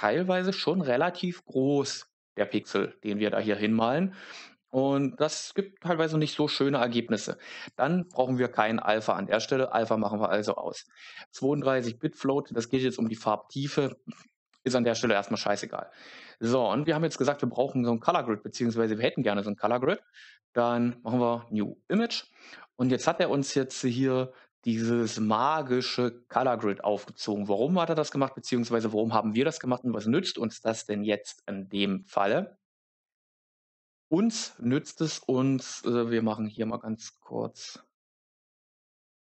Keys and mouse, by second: 35.7-39.2 drag.